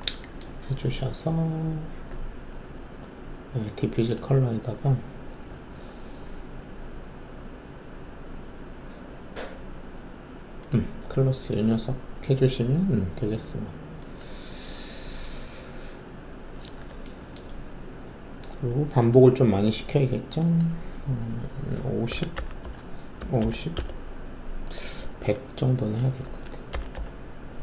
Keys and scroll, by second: 22.0-23.3 typing, 22.6 Tab, 23.7 Return, 26.2-26.9 typing.